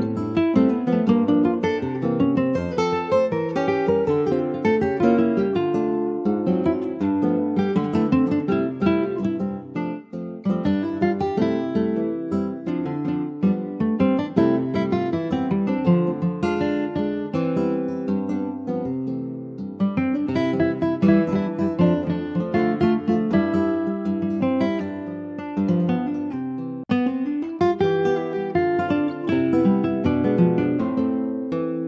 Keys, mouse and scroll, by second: 0.6 click, 8.7 click, 11.2-11.7 scroll down 5, 11.7 shift+middle click, 12.0-12.8 scroll down 3, 12.2 Tab, 12.8 click, 14.1 ctrl+z, 14.7 click, 15.1 Tab, 15.8 click, 18.4-19.4 drag, 20.9 Tab, 21.0 click, 21.4 alt+z, 21.7 middle click, 22.2 ctrl+s, 22.6-23.8 middle drag, 23.8 ctrl+s, 23.9 ctrl+click, 24.2 alt+z, 24.6 alt+middle click, 24.8 alt+scroll up 1, 25.0 alt+middle click, 26.0 ctrl+s, 26.2 click, 26.5 scroll up 1, 26.7 Tab, 27.9 ctrl+s, 28.5 Tab, 28.7 click, 29.5 click, 30.6 ctrl+s, 30.7 click.